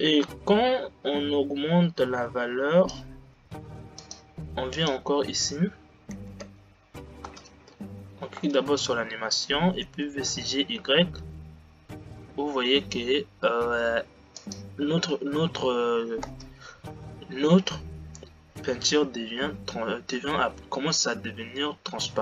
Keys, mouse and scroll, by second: 0.4-3.0 drag, 4.8 click, 6.6 g, 8.5 space, 10.1 g, 16.5 space.